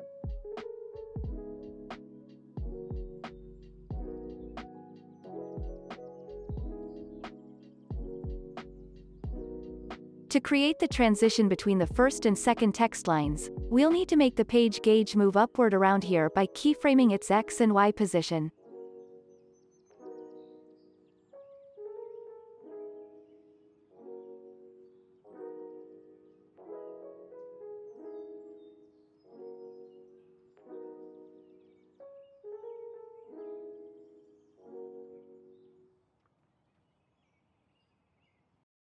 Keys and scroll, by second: 5.8 ctrl+c, 13.7 alt+x, 16.8 alt+x, 19.9 z, 22.7 Right, 25.7 z, 35.8 Down.